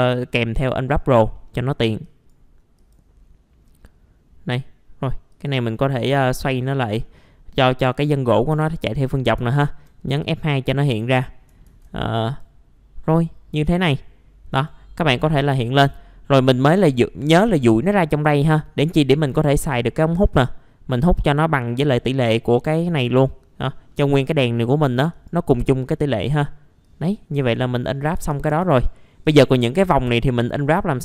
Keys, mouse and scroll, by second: 0.9 middle click, 1.5-2.0 scroll down 1, 2.8 click, 3.6-5.3 scroll up 1, 5.3 click, 6.6 middle click, 7.2-8.4 scroll up 1, 8.5 F2, 8.8-9.3 scroll down 1, 9.5 alt+middle click, 10.0-10.5 scroll up 1, 10.5 middle click, 11.2-11.5 scroll down 1, 12.2 click, 14.5 right click, 15.4 click, 19.8-20.9 scroll up 1, 20.9 click, 22.7 scroll down 1, 23.9 middle click, 25.1 right click, 26.8 click, 27.6 middle click, 28.0 scroll down 1, 28.1 F4, 28.6 scroll up 1, 28.7 F4, 29.2 click, 29.8 scroll up 1, 30.7 right click.